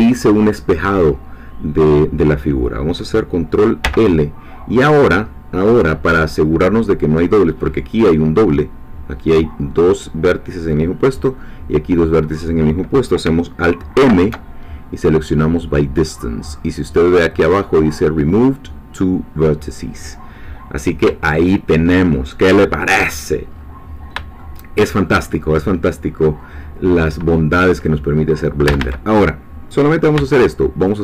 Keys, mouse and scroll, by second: 3.8 l, 5.8 3, 6.6-6.9 scroll up 2, 13.9 alt+m, 16.0 click, 20.5-21.0 scroll down 2, 21.3 shift+middle click, 22.1 shift+scroll down 2, 23.5-24.0 scroll up 2, 24.4 shift+middle click, 25.6-26.5 shift+scroll up 4, 27.5-28.7 scroll down 2, 28.7 a, 30.1 b, 30.9-31.0 drag.